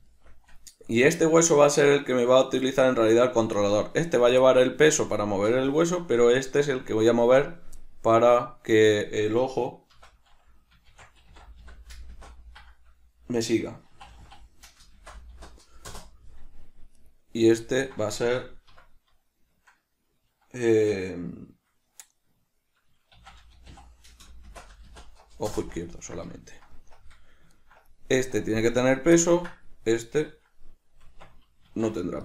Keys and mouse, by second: 0.2-17.1 shift+middle drag, 10.1 F2, 17.1 right click, 17.8-30.1 ctrl+middle drag, 18.9 F2, 30.1 right click, 31.2 Tab.